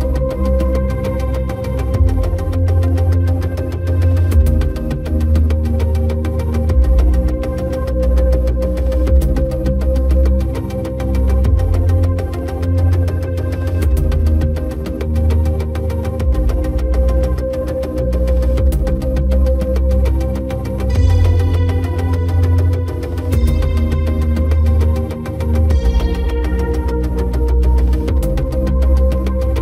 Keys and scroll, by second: 0.8 Return, 10.9 ctrl+g.